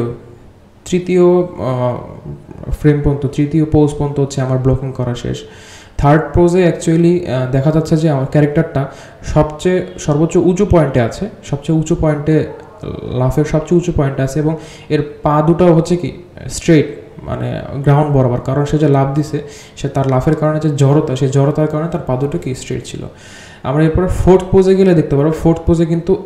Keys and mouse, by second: 0.2 g, 2.2 g, 4.5 click, 5.1 g, 6.5 drag, 6.8 g, 8.3-10.4 drag, 12.1-14.7 ctrl+drag, 15.8-16.8 drag, 17.1 g, 18.0 click, 18.4 g, 20.0 g, 21.4-23.1 drag.